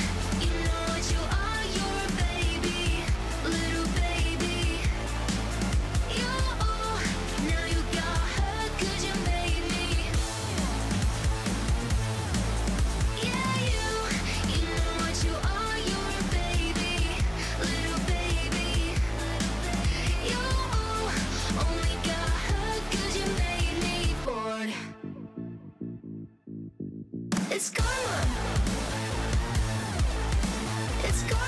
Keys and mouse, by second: 0.4 z, 0.8 middle click, 2.3 click, 4.4 click, 5.9 click, 6.8 click, 8.9 click, 14.0-16.3 drag, 17.6-19.5 drag, 22.8-24.8 drag, 28.8-29.3 drag, 29.4 click, 30.1 click.